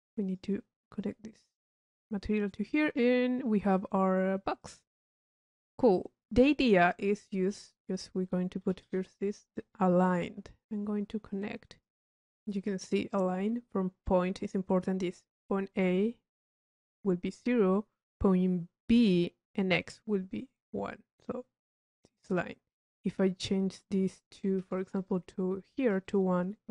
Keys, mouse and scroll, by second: 0.8 click, 2.8 click, 4.6 click, 5.3 middle click, 6.2-6.7 drag, 8.0 click, 8.9 i, 10.2-11.0 drag, 11.3-12.0 drag, 12.2 middle click, 12.5 drag, 23.2-23.8 drag, 25.7 drag.